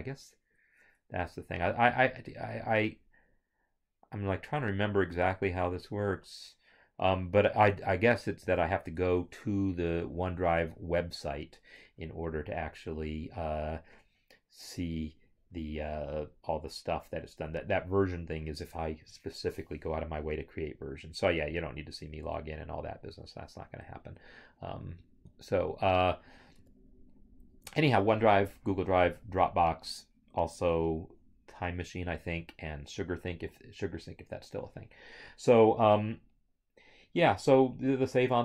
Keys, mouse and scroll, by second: 8.4 right click, 8.4 click, 22.2 alt+Tab, 26.7 alt+Tab.